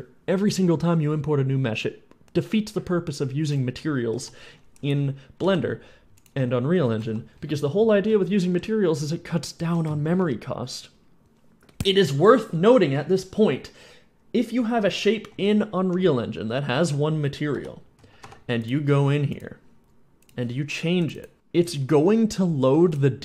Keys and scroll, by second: 4.0 F11, 4.4 F11, 5.5 alt+p, 6.3-10.3 typing, 15.1-16.9 typing, 17.6 F11, 18.4 Escape, 21.7 s, 22.6 w.